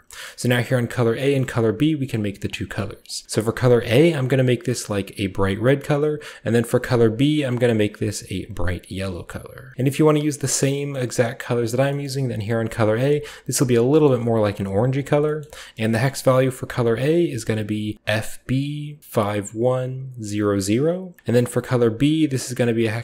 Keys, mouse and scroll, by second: 0.5-1.1 scroll up 1, 1.1-3.0 scroll up 1, 1.3 middle click, 3.0 click, 3.6 click, 4.2-5.3 drag, 6.4 click, 7.1 click, 7.6-8.4 scroll up 3, 8.4 click, 9.5 scroll up 1, 9.7 ctrl+v, 9.7-10.2 scroll down 1, 10.1 middle click, 10.2-11.2 scroll up 2, 10.9-11.9 middle drag, 11.7 scroll up 1, 11.7 scroll down 1, 11.8-12.7 scroll up 1, 12.0-13.8 middle drag, 12.7 scroll up 1, 14.0 middle click, 14.3 click, 15.2 middle click, 15.2 scroll down 1, 15.4-16.7 middle drag, 16.7-17.3 drag, 21.2-22.9 middle drag, 21.7-23.0 drag.